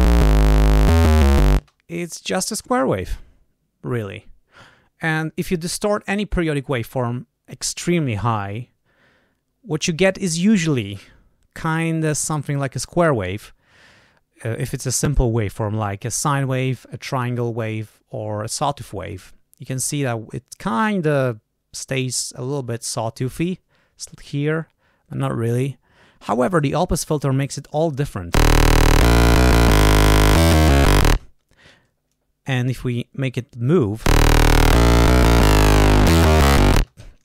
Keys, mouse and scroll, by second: 1.5 space, 26.5 click, 28.3 l, 31.0 space, 32.0 click, 34.0 l, 36.7 space.